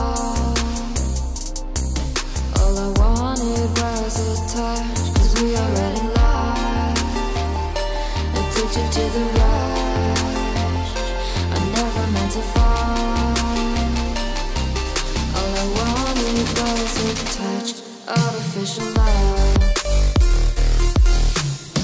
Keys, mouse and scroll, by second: 0.0-0.9 typing, 1.0 click, 1.7-3.6 drag, 4.7-8.2 typing, 8.4 click, 9.3 click, 9.9 ctrl+c, 10.2 click, 10.5 ctrl+v, 10.7 scroll down 1, 11.5 click, 12.1 scroll down 1, 12.7 click, 13.1 Return, 13.8-14.9 typing, 15.1 click, 17.4-21.8 typing, 19.3 Return.